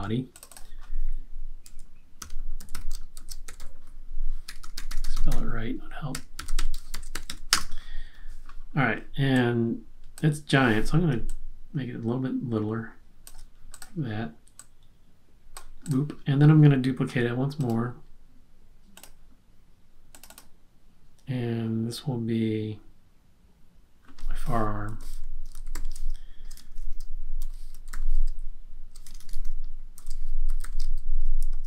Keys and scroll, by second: 2.3-7.7 typing, 8.7-9.5 typing, 24.8-29.0 typing, 30.2-31.6 typing.